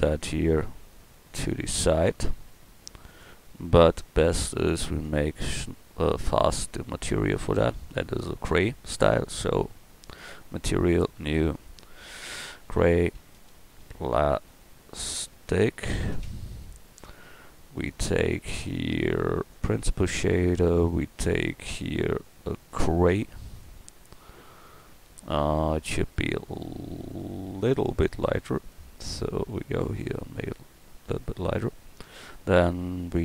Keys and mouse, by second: 0.8 g, 3.9 g.